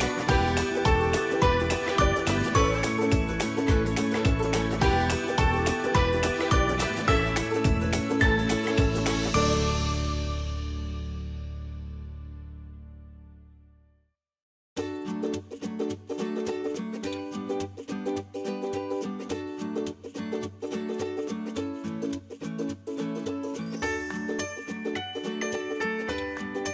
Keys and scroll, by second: 7.0 Caps_Lock, 9.9 BackSpace.